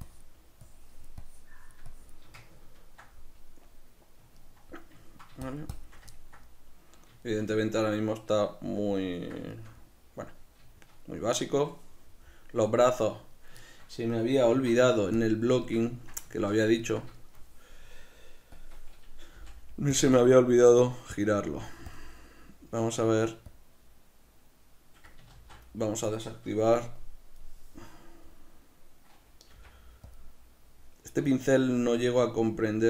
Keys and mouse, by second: 0.2-2.6 shift+drag, 2.6-5.6 ctrl+middle drag, 5.6 shift+click, 6.2-10.8 ctrl+middle drag, 14.6 alt+q, 15.8 shift+middle click, 17.3-18.6 shift+middle drag, 18.6-20.1 drag, 19.4 f, 21.5 f, 22.0 click, 24.0-30.3 drag, 25.8 ctrl+z, 29.6 f, 31.4-32.8 middle drag.